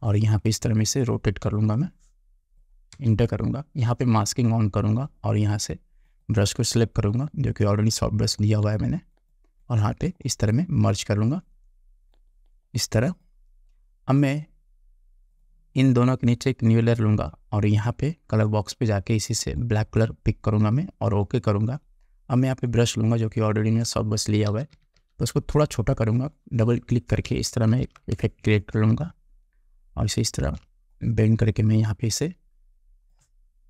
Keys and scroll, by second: 3.0 Return, 24.6 [, 27.8 ctrl+t.